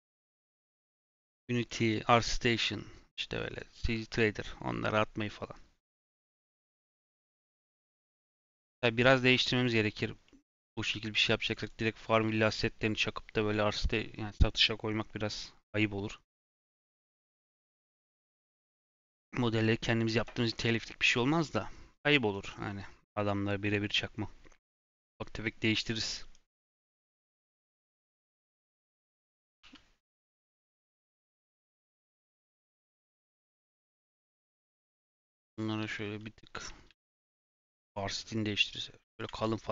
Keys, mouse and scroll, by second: 21.0-24.0 middle drag, 26.8 shift+middle click, 27.3-28.3 scroll up 1, 28.3 click, 29.1 click, 29.6 3, 30.5 l, 31.9 l, 32.5 l, 33.0 l, 34.8 l, 35.4 l, 35.7 l, 36.0 l, 36.8 alt+s, 39.3 Tab.